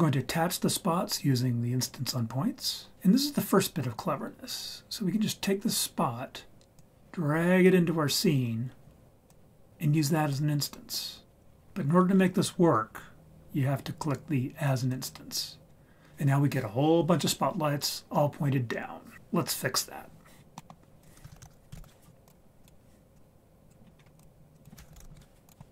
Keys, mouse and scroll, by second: 6.8 click, 8.3-9.3 scroll down 3, 9.3-10.4 drag, 11.4-11.9 scroll down 3, 11.9-12.6 scroll up 6, 14.9 click, 20.4-20.7 scroll down 4, 20.6 middle click, 21.0 click, 21.3 shift+a, 23.1-23.7 drag, 23.8-24.1 scroll down 2, 24.0 scroll up 3, 24.1 click, 24.5 click.